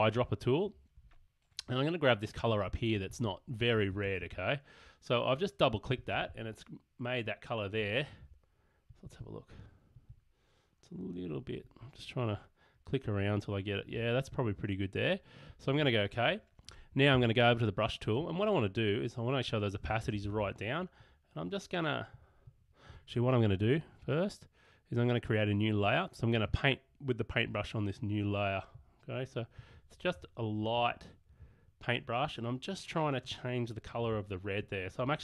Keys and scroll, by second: 17.2 b, 20.0 ].